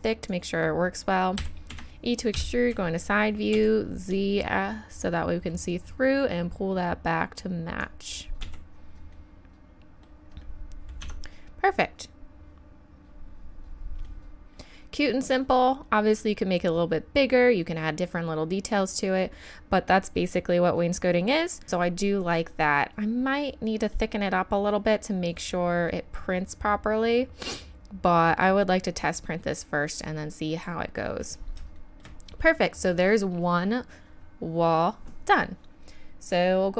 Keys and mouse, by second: 1.4 e, 2.3 KP_3, 3.5 z, 5.7-7.6 drag, 8.4 z, 9.2 middle click, 9.4 middle click, 9.6 middle click, 11.0 Tab, 13.0-14.4 middle drag, 15.5-17.7 middle drag, 25.6 middle click, 26.0 middle drag, 26.1 middle click, 28.1 middle click, 30.0-30.7 drag, 30.7-35.8 middle drag.